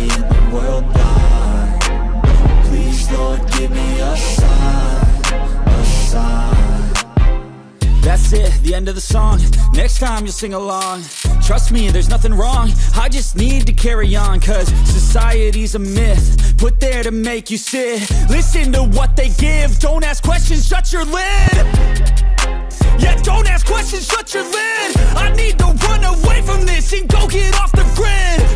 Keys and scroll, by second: 8.1 ctrl+alt+z, 10.4 ctrl+alt+z, 10.6 ], 10.9 ctrl+=, 12.8 ctrl+=, 15.6 ctrl+=, 20.4 ctrl+=.